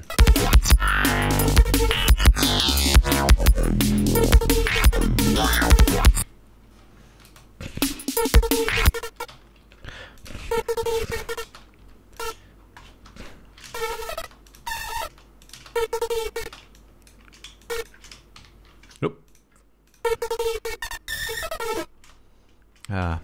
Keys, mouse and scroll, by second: 0.0 click, 0.4 space, 1.8 ctrl+scroll down 2, 2.2 ctrl+scroll up 2, 6.7 ctrl+scroll down 2, 7.6 ctrl+space, 8.0 ctrl+click, 8.3 ctrl+scroll up 1, 9.2 click, 9.6 space, 9.7 ctrl+scroll up 1, 9.9 ctrl+d, 10.5 ctrl+click, 10.6 space, 10.8 ctrl+scroll up 2, 11.8 space, 12.2 e, 12.5 click, 13.6 alt+shift+Up, 14.1 alt+shift+space, 14.8 click, 15.8 click, 16.8 space, 17.1 shift+click, 18.8 alt+shift+Up, 20.4 space, 22.4 space, 22.6 scroll up 2, 22.9 scroll down 2.